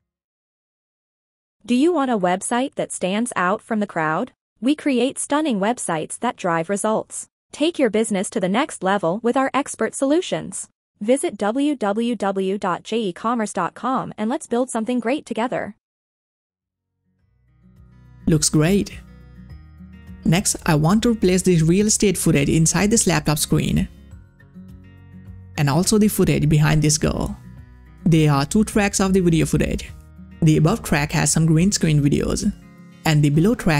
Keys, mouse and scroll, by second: 1.1 click, 1.5 space, 18.6 space, 20.4 click, 23.9 click, 25.2 click.